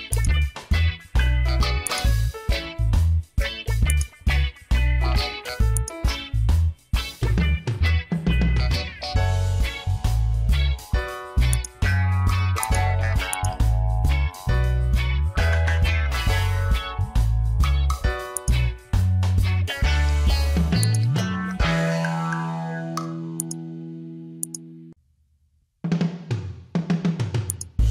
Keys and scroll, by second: 8.5 Return.